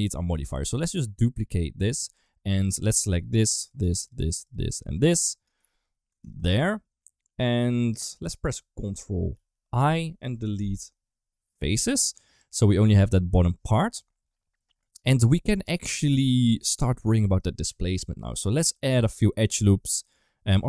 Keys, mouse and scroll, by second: 0.5 shift+middle click, 2.0 Tab, 2.5 3, 2.9 click, 3.4 shift+click, 3.5 shift+click, 3.7 shift+click, 3.9 shift+click, 4.3 shift+click, 4.7 shift+click, 4.8 shift+click, 5.5 ctrl+z, 6.3 shift+click, 9.2 ctrl+i, 10.4 Delete, 12.3 Tab, 12.5 middle click, 13.8 KP_1, 14.7 middle drag, 15.6 shift+middle drag, 18.4 Tab, 18.6 middle click, 19.7 middle click, 20.4 Tab.